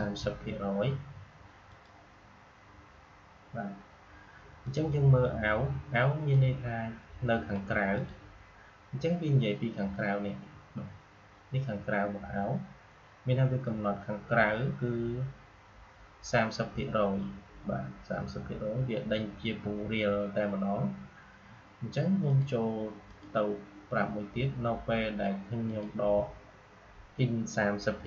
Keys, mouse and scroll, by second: 1.6 click, 4.6-10.1 drag, 22.2 click, 25.5 click.